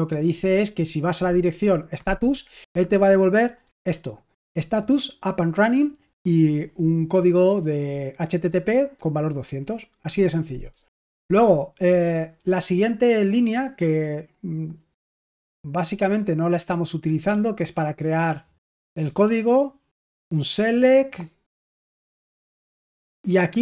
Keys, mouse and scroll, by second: 3.6 typing, 10.6-11.1 typing, 13.4 typing, 17.2-23.6 typing.